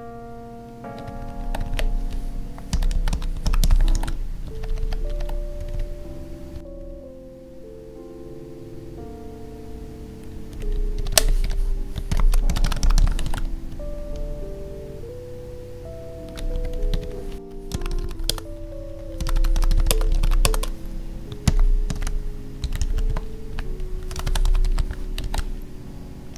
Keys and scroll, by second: 1.0 ctrl+Right, 1.5 Right, 3.9 ctrl+s, 4.5 ctrl+Left, 5.6 Right, 10.5 Right, 13.2 ctrl+s, 13.7 Up, 16.9 Up, 18.2 space, 19.9 space, 20.4 space, 23.1 Tab, 25.2 ctrl+s.